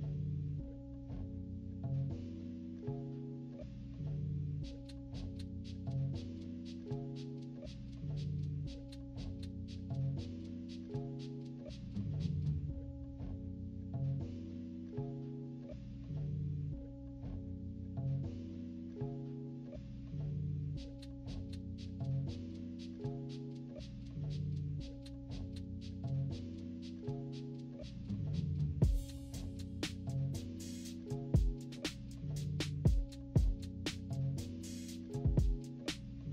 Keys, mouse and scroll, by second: 2.9 -, 3.1 =, 3.2-4.9 drag, 4.9 -, 5.1 scroll up 1, 5.3 click, 5.8 click, 6.1 z, 6.7-7.9 drag, 8.0 -, 8.1 scroll up 1, 8.1 =, 8.4-9.6 drag, 9.7 -, 9.9 scroll up 1, 10.0 =, 10.3 right click, 10.5-12.4 drag, 12.6 -, 12.8 scroll up 1, 13.1 scroll down 1, 13.3 -, 13.4 scroll up 2, 13.5 =, 13.8-15.4 drag, 15.6 click, 16.2 click, 16.7 -, 16.9-17.2 scroll up 1, 16.9 =, 17.2 click, 17.9 -, 18.1 scroll down 1, 18.4 =, 18.8-20.5 drag, 20.5-22.1 typing, 20.7 scroll up 1, 20.9 click, 21.8 scroll up 1, 22.0-22.4 scroll down 2, 22.4-23.4 drag, 23.9 click, 24.4-27.6 typing, 24.8 scroll up 1, 25.2 scroll down 1, 25.5 click, 26.0 scroll up 1, 26.3 click, 27.1 scroll down 1, 27.6 scroll up 1, 27.6 scroll down 1, 27.8-29.4 drag, 29.5 -, 29.6 scroll up 1, 29.8-30.8 drag, 31.5 -, 31.6 =, 31.7-32.7 scroll down 4, 31.9 click, 32.2 -, 32.4 =, 32.7-34.2 drag, 34.2 -, 34.3 scroll down 1, 34.4 scroll up 1, 34.4 =, 34.5 scroll down 1, 34.5 =, 34.8-36.2 drag, 36.2 -.